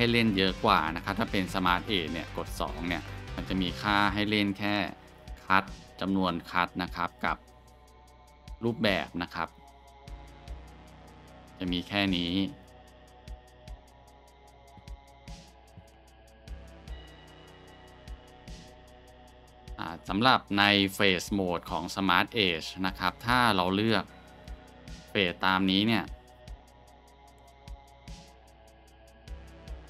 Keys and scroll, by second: 1.2 ctrl+z, 2.5 2, 13.2-13.7 scroll, 14.4 Tab, 15.3 Delete, 16.1 shift+a, 19.1 Tab, 21.0 scroll, 29.3 Tab.